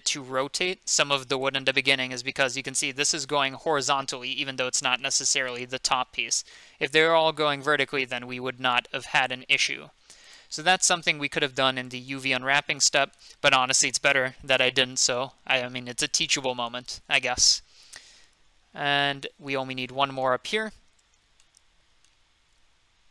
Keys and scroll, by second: 17.9 F2, 19.1 F3.